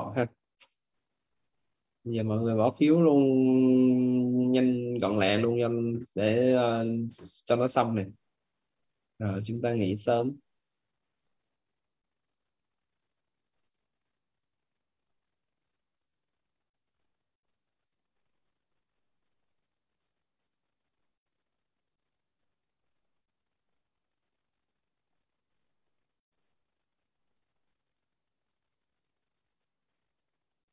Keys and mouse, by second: 8.2 click, 11.6 click, 19.4 click, 22.1 click, 27.2 right click, 28.0 click.